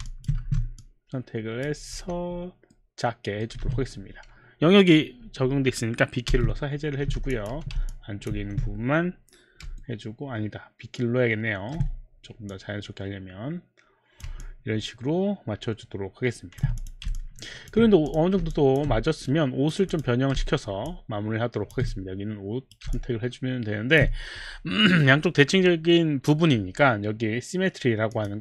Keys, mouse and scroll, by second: 0.0 alt+click, 0.4 q, 0.6 alt+click, 0.6 q, 0.8 click, 1.9 r, 2.7 middle click, 3.5 middle click, 3.5 z, 6.3 b, 7.3 alt+click, 7.5 alt+click, 7.5 4, 8.1 alt+click, 8.2 alt+4, 8.4 5, 9.7 b, 9.8 middle click, 12.5 click, 13.5 click, 15.0-17.8 alt+drag, 18.1 click, 18.5 click, 19.3 right click, 19.7 right click, 19.8 click, 20.6 alt+middle click, 20.6 click, 20.8 alt+click, 21.3 alt+click, 21.3 alt+middle click, 21.5 alt+click, 21.9 right click, 22.9 alt+click, 28.2 click.